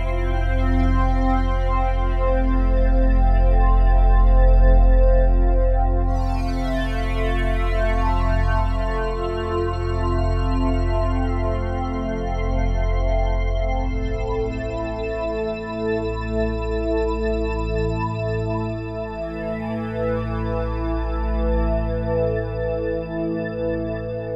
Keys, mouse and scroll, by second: 2.7 click, 5.7 click, 7.8 click, 12.6 click, 13.9 click, 15.0 click, 19.8 click, 21.0-21.3 typing, 22.5 click.